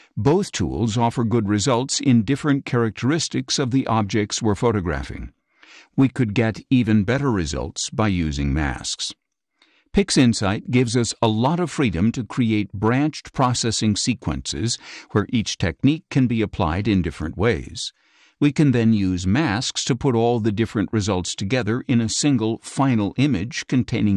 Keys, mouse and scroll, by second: 0.3 scroll up 2, 4.3 ctrl+shift+z, 16.2 click, 17.7 click, 18.8 click.